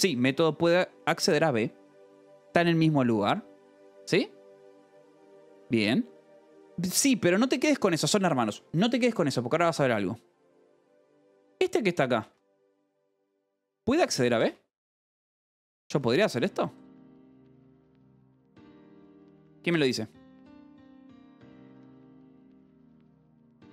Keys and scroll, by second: 0.0-1.8 typing, 0.2 Escape, 2.4 Escape, 5.9 j, 10.1 j, 11.3-15.8 typing, 14.8 Escape, 17.2-18.1 typing.